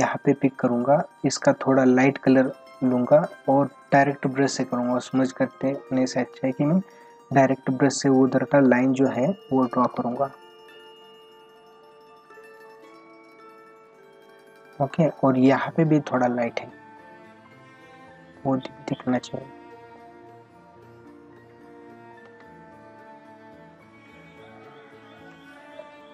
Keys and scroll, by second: 8.5 ctrl+alt+z, 9.9 ctrl+alt+z, 22.3 ctrl+alt+z, 22.9 ctrl+=.